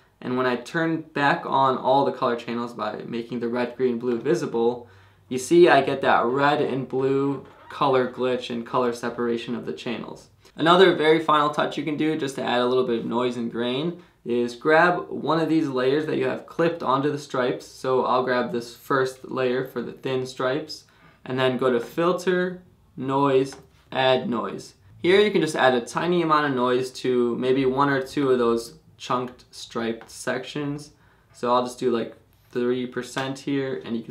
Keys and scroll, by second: 33.2 Return.